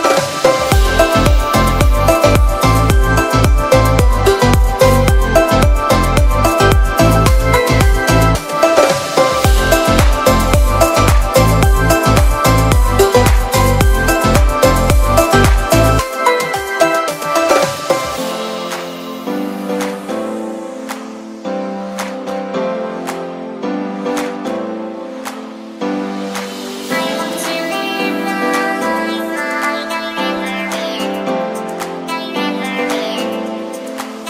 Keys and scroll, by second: 1.3 b, 1.7 [, 3.4 super+z, 4.6 r, 5.4 e, 7.8 b, 8.4 ], 10.0 e, 12.2 b, 13.7 super+z, 14.9 e, 19.3 b, 20.5 super+z, 21.9 e, 24.6 b, 24.9 [, 26.4 super+z, 28.6 [, 30.0 ctrl+super+z, 32.0 e, 32.5 ], 33.3 [.